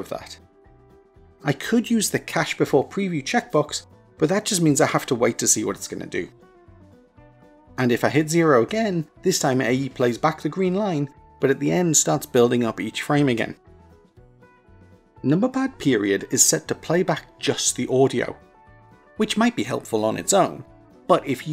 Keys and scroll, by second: 15.4 KP_Decimal.